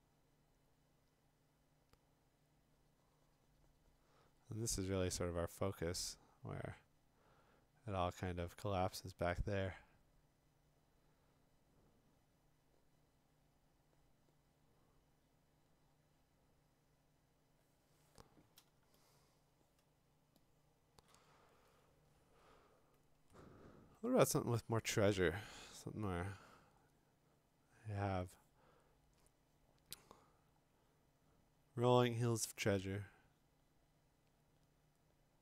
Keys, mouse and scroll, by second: 19.1-20.2 scroll, 20.2 click, 20.2-20.8 click, 20.3 click, 20.4 click, 20.4 click, 21.0 click, 21.0 click, 21.1 click, 22.1-22.6 scroll, 23.3-23.7 scroll, 24.3 middle click, 24.3 middle click, 24.4 middle click, 24.5 middle click, 24.6 middle click, 26.2 click, 26.2 scroll, 28.6 click, 29.2 click.